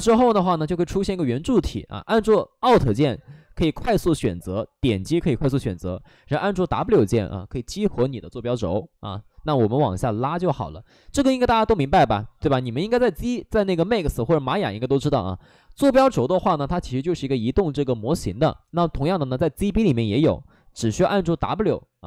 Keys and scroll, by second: 6.6 w.